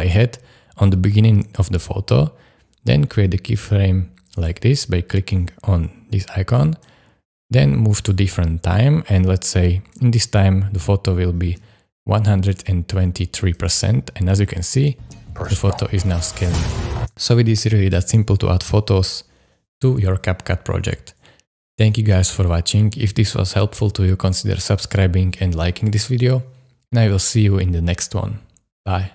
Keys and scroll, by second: 14.8 space, 17.0 space.